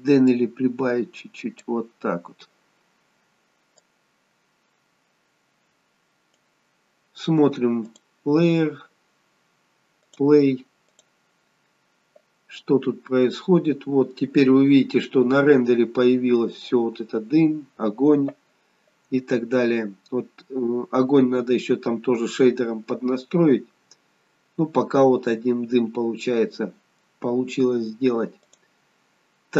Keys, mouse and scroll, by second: 8.2 click, 10.1 click, 10.9 click, 28.6 click.